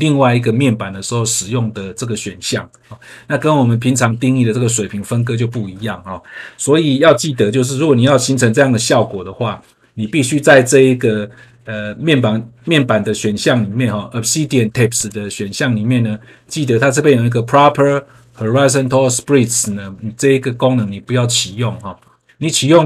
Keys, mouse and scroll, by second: 8.0 click, 10.3 scroll down 1, 14.9 click, 15.9-17.0 scroll down 1.